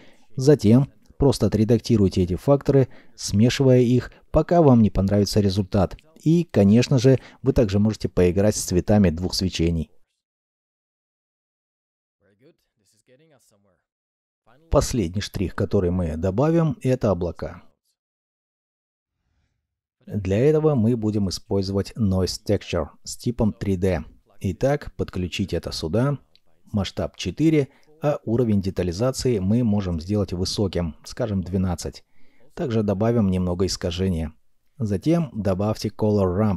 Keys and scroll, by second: 1.6 alt+F9, 3.3-5.3 typing, 3.4 Return, 4.2 Return, 5.4 Return, 16.3 m, 17.2 m, 19.7 g, 20.4 n, 20.5 ctrl+a, 20.6 o, 20.7 i, 25.5 KP_4, 25.7 KP_Enter, 28.2 KP_1, 28.5 KP_2, 28.5 KP_Enter, 30.1 KP_Enter, 30.1 KP_2, 34.3 Return, 35.5 r, 36.1 m.